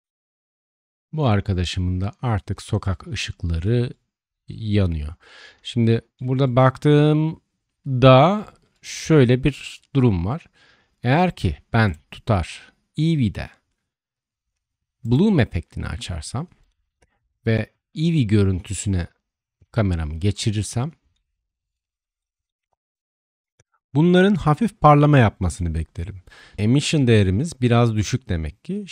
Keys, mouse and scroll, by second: 0.8-3.6 middle drag, 15.0 click, 17.8 click, 21.9-22.4 shift+middle drag, 25.6-26.2 shift+middle drag, 26.6-28.9 shift+drag.